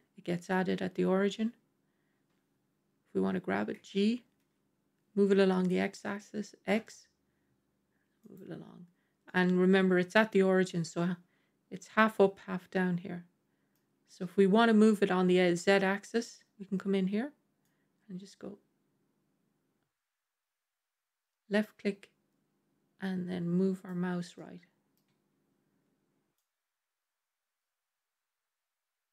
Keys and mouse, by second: 3.6 g, 9.1-13.7 middle drag, 17.6-23.9 drag, 24.2-24.8 middle drag, 26.2-29.1 drag.